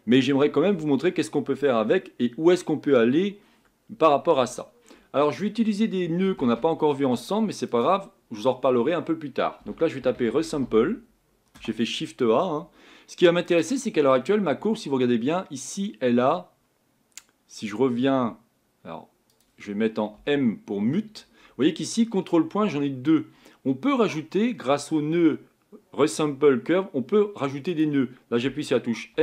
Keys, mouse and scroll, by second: 20.2 m.